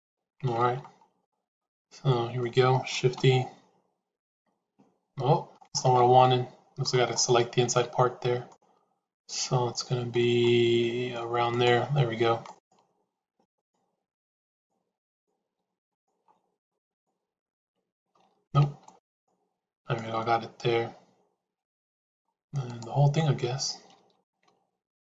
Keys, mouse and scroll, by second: 0.8 shift+z, 1.2-2.3 middle drag, 6.1 middle click, 7.8 shift+z, 8.4-10.1 middle drag, 10.4 middle click, 13.4 click, 16.7 shift+click, 18.1 ctrl+z, 18.7 shift+a, 19.9-22.1 middle drag, 22.4 shift+a, 23.9 ctrl+z.